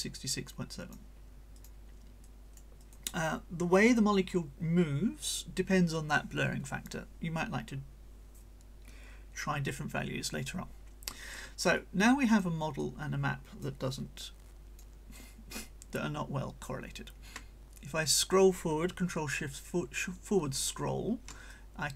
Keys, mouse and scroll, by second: 1.6 click, 2.2 right click, 2.8 click, 11.7-12.6 drag, 12.8-13.8 drag, 14.2-15.0 drag, 15.1-16.9 drag, 18.0 ctrl+shift+scroll up 1, 21.5-21.9 ctrl+shift+drag.